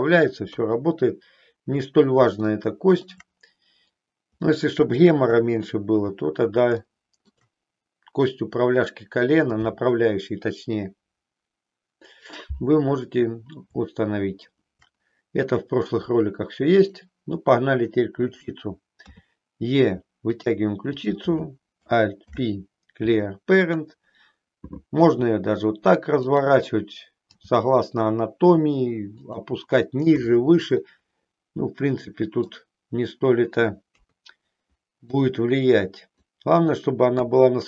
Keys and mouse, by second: 0.5 KP_3, 2.4 shift+middle click, 4.5 middle click, 5.4 KP_1, 6.8 shift+middle click, 14.0 shift+middle click, 19.1 e, 20.4 click, 21.0 click, 22.4 alt+p, 25.0 r, 26.2 click, 27.4 g, 29.4 click, 30.7-32.6 middle drag, 33.8 KP_3, 35.1-36.2 drag, 37.1 KP_1.